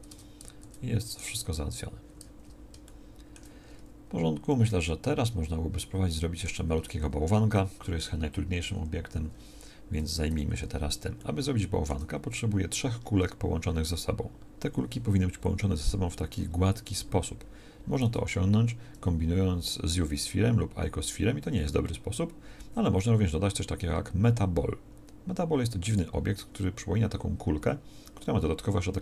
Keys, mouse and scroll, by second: 0.1 Tab, 0.6 Tab, 10.2 1, 18.0 shift+a.